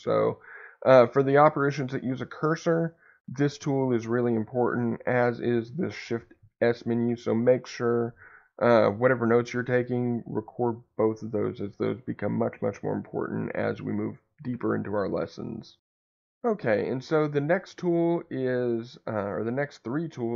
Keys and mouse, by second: 5.4 shift+s.